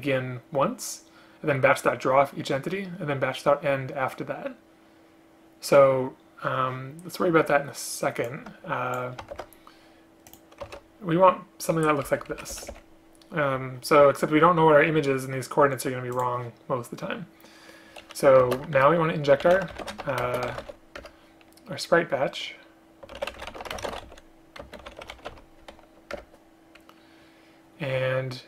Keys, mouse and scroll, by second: 9.5 ctrl+c, 10.8 ctrl+v, 12.2 Up, 12.6 shift+End, 12.8 Delete, 18.5 space, 20.3 space, 21.1 Return, 23.8 space, 24.7 space, 26.2 Return.